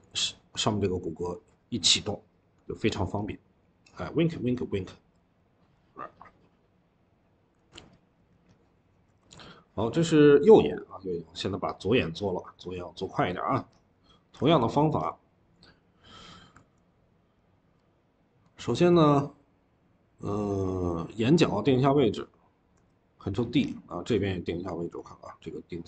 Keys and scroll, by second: 7.4 ctrl+z, 9.0 ctrl+z, 14.3 ctrl+z, 22.6 ctrl+d.